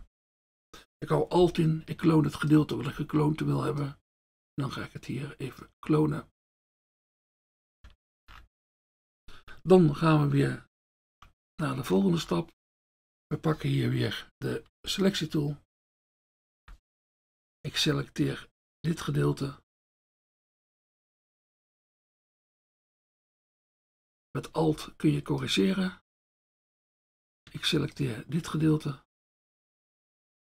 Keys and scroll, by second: 14.7 F1.